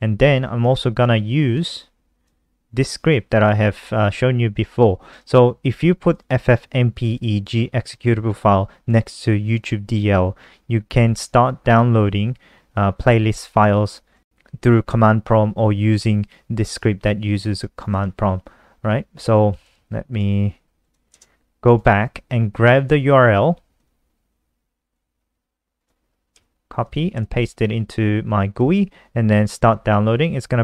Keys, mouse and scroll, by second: 0.8 click, 5.4 click, 13.5 click, 16.6 click, 26.3 ctrl+c, 26.8 click, 27.0 ctrl+v, 28.2 click.